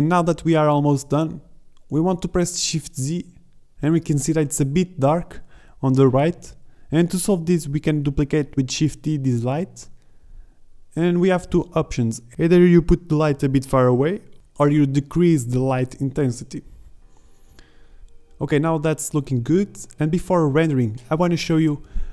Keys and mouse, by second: 1.1-2.7 middle drag, 3.1 z, 3.6-5.2 drag, 5.2 shift+d, 9.1 shift+z, 12.7 z, 14.5 shift+z, 15.4 g, 16.5 click, 17.0 g, 17.6 z, 18.2 middle drag, 18.5 KP_0, 18.6 shift+z, 21.9 shift+z.